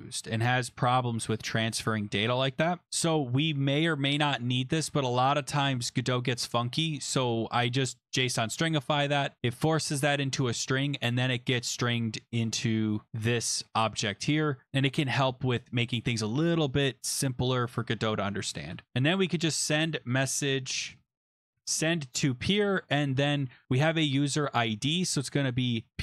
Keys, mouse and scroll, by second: 12.7 click, 15.3 click, 18.6-21.2 typing, 19.1 click, 21.6 Tab, 25.7-26.0 typing.